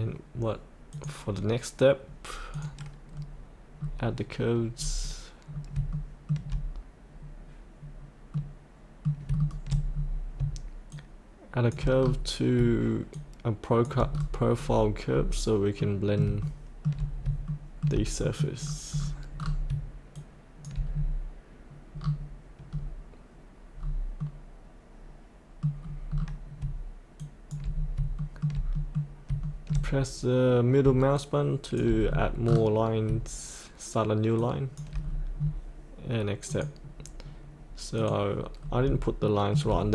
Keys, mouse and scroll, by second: 0.9 click, 3.0-4.7 scroll down 1, 4.7-5.4 scroll up 1, 5.4 scroll down 1, 5.9 shift+middle click, 7.7-8.3 scroll up 1, 8.3 middle click, 9.3 shift+middle click, 9.9-10.4 scroll down 1, 10.9 shift+click, 11.9-12.5 scroll down 1, 13.1 shift+click, 14.1-15.2 scroll up 1, 15.8 middle click, 16.4 shift+middle click, 17.5 shift+middle click, 18.2 middle click, 18.5-19.6 scroll down 1, 20.1 shift+click, 20.9-22.0 scroll down 1, 22.0-24.2 scroll up 1, 24.2-25.6 middle drag, 25.8-26.6 scroll down 1, 27.1 shift+click, 27.6 scroll up 1, 28.2 shift+middle click, 28.7 middle click, 29.4 shift+middle click, 31.1 shift+click, 32.0-33.0 scroll down 1, 34.4 shift+click, 34.9-36.5 scroll up 1, 36.5 click, 38.5-38.8 scroll up 1, 39.2 shift+middle click, 39.7-39.9 scroll down 1.